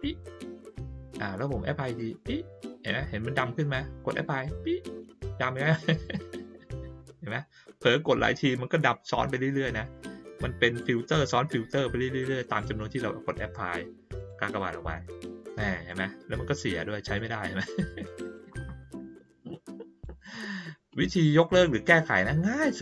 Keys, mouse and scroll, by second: 1.8 click, 4.3 click, 14.1 click, 15.2-15.8 drag, 17.1-18.3 drag, 19.2-20.0 drag, 20.9-21.5 drag.